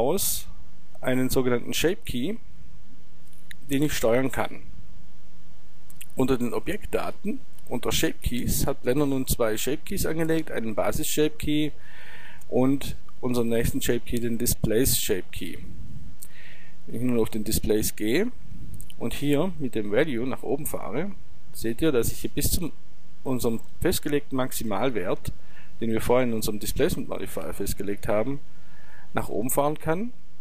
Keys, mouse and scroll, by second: 6.7-8.5 drag, 16.9-18.7 drag, 20.1-22.0 drag.